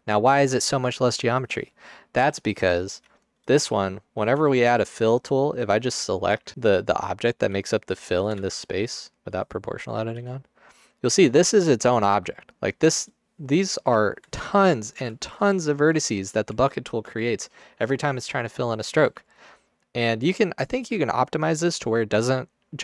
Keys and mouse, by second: 4.5 Tab, 7.4 g, 8.5 ctrl+z, 10.3 g, 12.2 g, 19.5 ctrl+alt+click, 19.8 ctrl+alt+click.